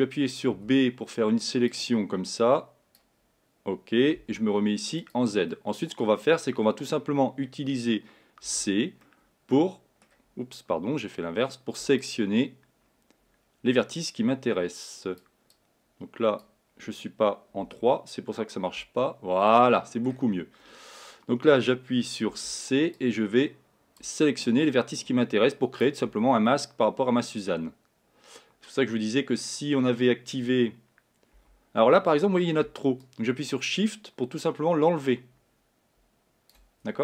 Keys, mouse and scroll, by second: 0.8 b, 4.4 z, 5.6-7.3 middle drag, 7.3-8.8 scroll up 3, 8.8 c, 19.0 3, 19.5-22.5 middle drag, 22.5 c, 26.7-29.6 middle drag, 31.7 c.